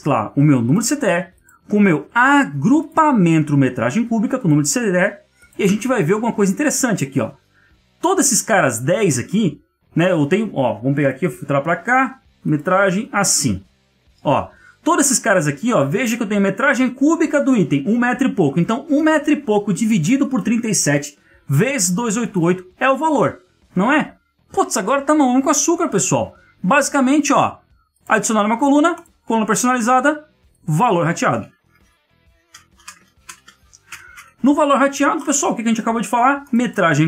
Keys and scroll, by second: 33.8 Tab.